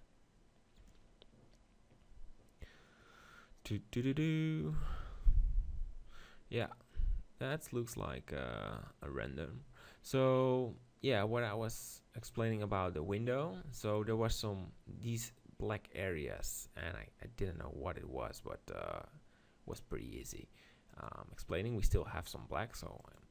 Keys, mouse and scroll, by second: 22.0-23.3 drag.